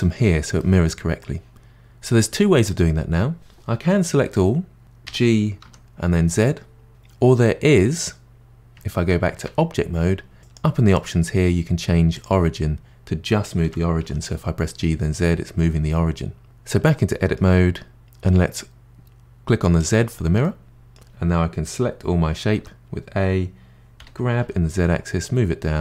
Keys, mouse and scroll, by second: 4.2 a, 5.0 g, 9.4 Tab, 10.4 click, 10.9-13.6 drag, 13.6 g, 16.4 Tab, 16.8-18.8 middle drag, 19.8 click, 20.4-22.5 middle drag, 22.5 a, 24.0 g.